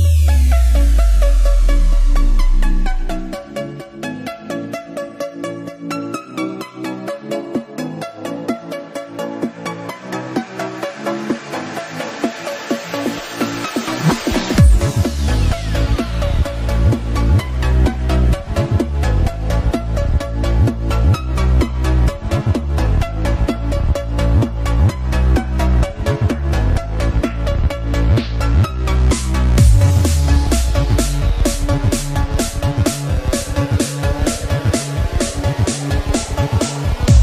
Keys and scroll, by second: 5.8 ctrl+-, 7.3 ctrl+-, 10.1 space, 10.2 ctrl+=, 12.6 ctrl+=, 13.2 space, 27.7 space, 29.9 ctrl+z.